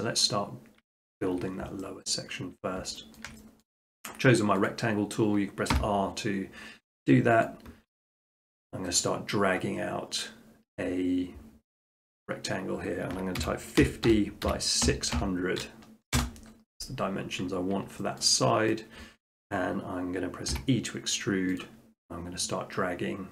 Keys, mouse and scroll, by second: 0.2-0.7 scroll, 1.2 shift+middle click, 2.0 middle click, 3.2 shift+middle click, 3.6 middle click, 4.7 click, 5.7 r, 7.5 click, 8.1-8.5 drag, 13.4-14.9 typing, 16.2 Return, 17.5 middle click, 17.9 middle click, 18.2 shift+middle click, 18.7 middle click, 18.9 scroll, 20.5 e, 21.6 click.